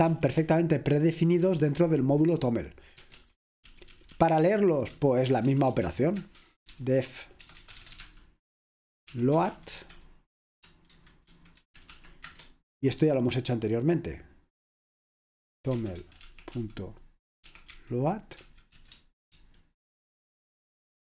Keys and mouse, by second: 0.1 ctrl+p, 0.4 ctrl+p, 1.5 Return, 3.0-12.4 typing, 6.2 Return, 15.5-19.4 typing.